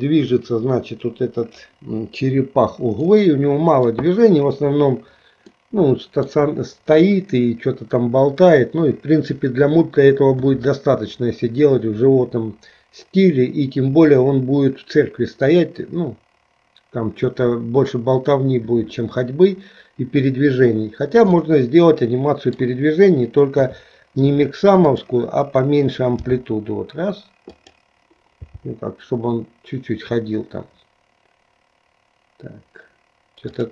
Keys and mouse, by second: 3.1 middle click, 5.6 middle click, 7.1 KP_1, 21.4-22.8 middle drag, 23.6 KP_3, 24.9 click, 26.2 g, 28.6 g.